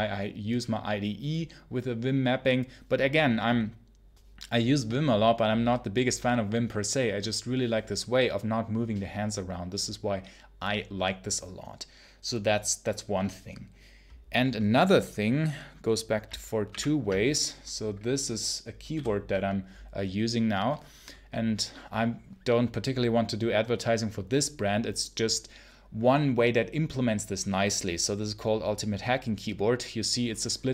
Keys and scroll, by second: 16.6 super+1.